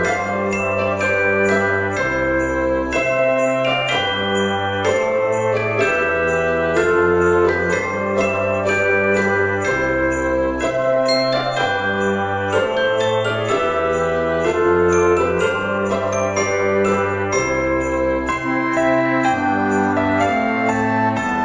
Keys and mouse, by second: 0.4 click, 1.2 a, 1.6 middle click, 2.4 e, 4.9 click, 5.5 KP_7, 6.5 o, 7.0 r, 8.5 click, 8.9 alt+z, 9.2 click, 10.1 alt+z, 10.7 r, 12.2 click, 12.5 middle click, 13.6 ctrl+z, 14.1 alt+e, 16.1 alt+e, 16.6 click, 19.0 click, 19.3 Tab, 19.6 right click, 19.9 click.